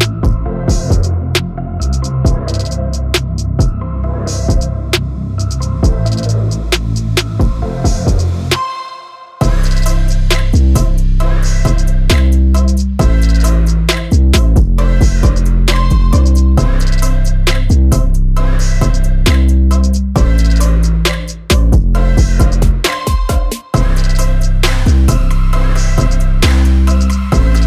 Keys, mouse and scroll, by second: 1.2-6.5 drag, 7.9-12.6 typing, 16.5 click, 17.4 ctrl+e, 18.5 click, 19.3 KP_3, 19.9 Return, 22.0 click, 22.6-24.1 typing, 24.7 Return, 27.3-27.6 drag.